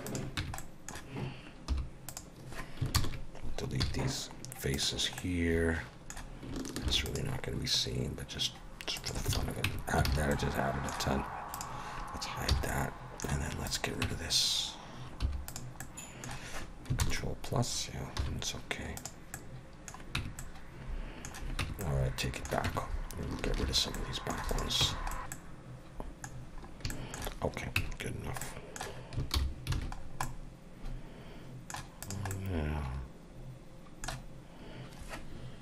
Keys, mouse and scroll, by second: 0.1 click, 0.4 Tab, 0.6 middle click, 1.7 3, 2.1 click, 2.9 ctrl+KP_Add, 3.8 x, 5.3 middle click, 6.8 ctrl+r, 9.3 alt+a, 9.6 Tab, 10.1 alt+a, 10.3 middle click, 11.5 click, 12.5 h, 12.7 middle click, 13.7 click, 14.0 Tab, 15.2 3, 15.5 click, 15.8 middle click, 17.0 ctrl+KP_Add, 18.2 x, 19.3 middle click, 20.2 Tab, 20.4 middle click, 21.6 Tab, 21.8 middle click, 22.6 Tab, 23.7 shift+h, 23.9 middle click, 24.5 click, 24.8 Tab, 25.1 middle click, 25.2 alt+a, 25.2 scroll down 3, 25.2 b, 25.2 x, 25.3 middle click, 26.4 scroll down 2, 26.9 shift+middle click, 27.8 Tab, 28.4 middle click, 29.4 alt+h, 29.7 alt+a, 30.0 scroll down 3, 30.2 middle click, 32.0 click, 32.3 middle click.